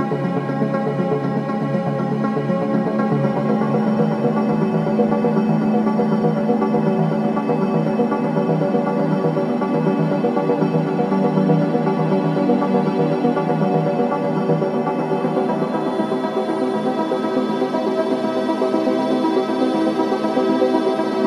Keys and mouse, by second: 0.8-2.8 drag, 4.9 click, 5.5-6.8 middle drag, 6.6 shift+a, 17.1 x, 20.9-21.2 drag.